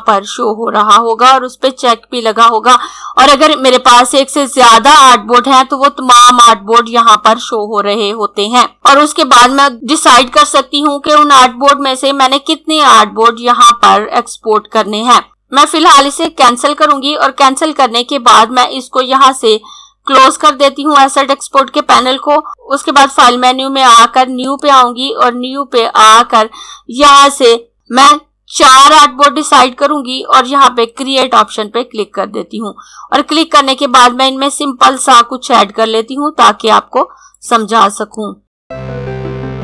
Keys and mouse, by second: 16.3 click, 20.1 click, 24.4 click, 27.7 click, 28.7 4, 31.0 click, 37.3 click.